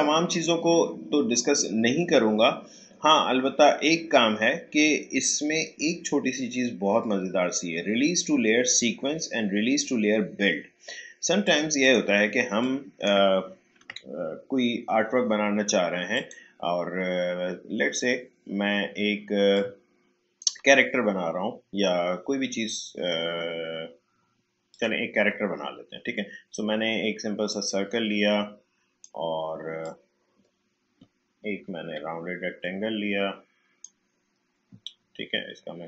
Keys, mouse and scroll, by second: 11.4 click, 13.8 Delete, 16.1 click, 19.5-22.8 drag, 24.7 click, 27.4-31.6 drag, 31.6 Up.